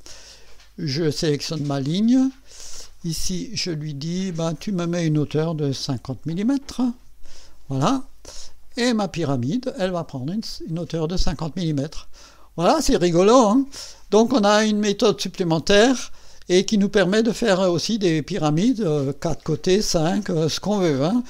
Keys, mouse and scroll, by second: 1.1 click, 3.0 click, 6.0 KP_5, 6.3 KP_0, 8.8 click, 9.8-13.3 drag, 13.6 scroll up 1, 14.1 right click, 15.1-18.1 drag, 17.4-18.1 right drag, 18.5 click, 21.0 scroll down 1.